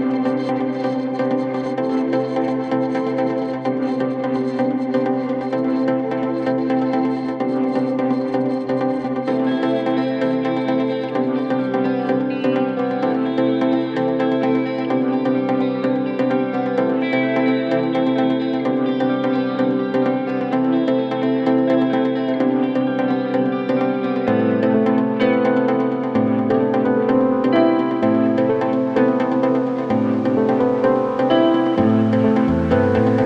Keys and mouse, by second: 10.3-33.2 middle drag, 18.0 KP_1, 18.1 KP_3, 22.2 click, 23.2 Tab, 23.9 z, 25.9 click, 26.2 b, 27.1 b, 28.9 b, 29.4 b, 31.0 b, 32.3 r.